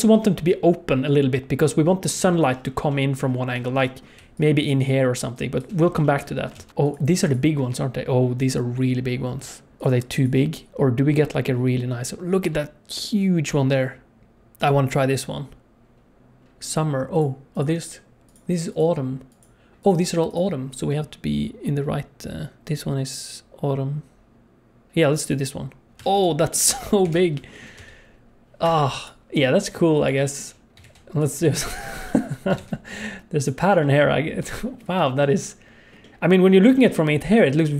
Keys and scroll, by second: 4.2-5.6 typing, 6.6 ctrl+s, 26.0 alt+a, 27.0 KP_7, 27.8 g, 29.4 g, 30.8 shift+d, 31.6 shift+d, 32.6 shift+d.